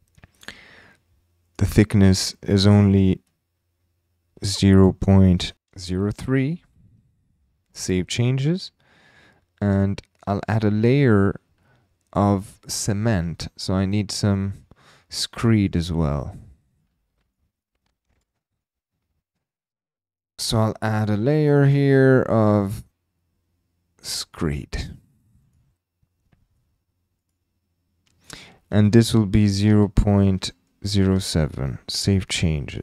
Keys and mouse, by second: 1.4 click, 2.8-6.1 drag, 7.8-8.4 drag, 11.1-12.9 drag, 14.5 click, 15.6 click, 16.8 click, 17.2 e, 17.6 click, 18.1 BackSpace, 18.1 BackSpace, 18.6 click, 20.0 click, 22.4-25.6 drag, 28.8-31.1 drag.